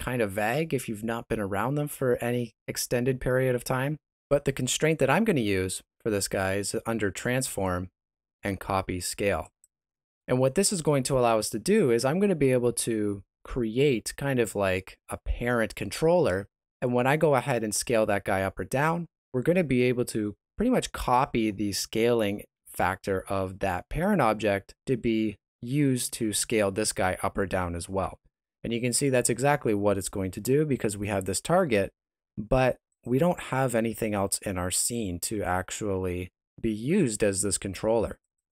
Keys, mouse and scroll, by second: 13.6 Tab, 13.6 middle click, 14.9 s, 17.9 right click, 17.9 click, 18.4 s, 32.9 click.